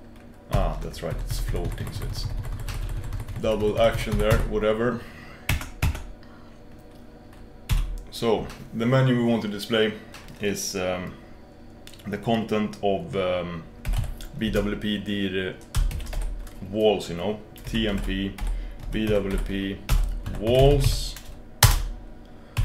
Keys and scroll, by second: 0.5 ctrl+super+h, 1.2 h, 5.7 Escape.